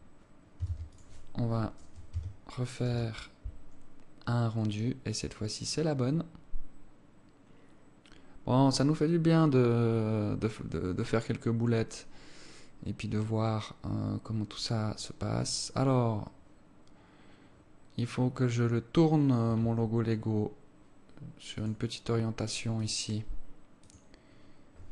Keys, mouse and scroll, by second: 0.0-0.3 scroll down 3, 1.1 ctrl+s, 2.5 Tab.